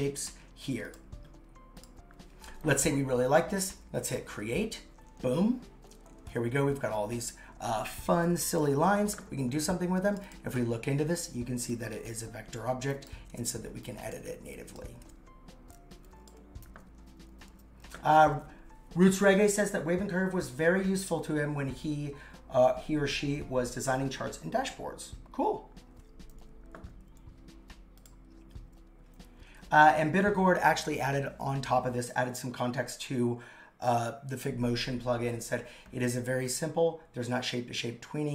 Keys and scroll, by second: 13.3 super+x, 15.2 super+x.